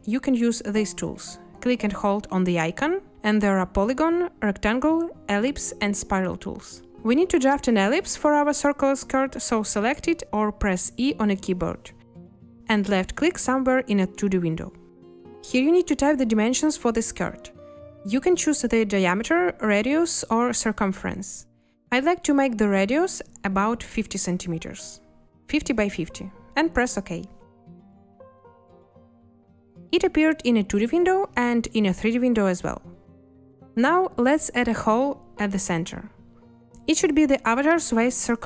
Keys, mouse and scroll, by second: 23.9 5, 24.5 0, 34.6 a.